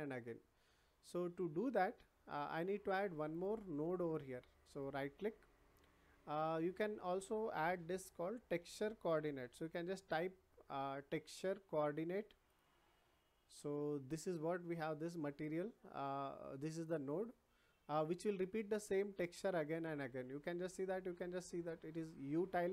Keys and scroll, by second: 8.6 t.